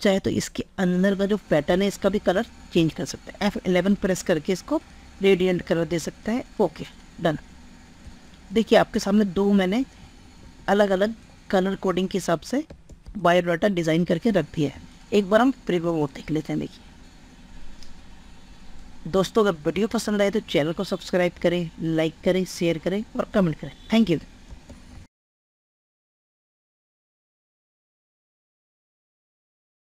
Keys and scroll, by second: 2.3 F11, 6.3 F11.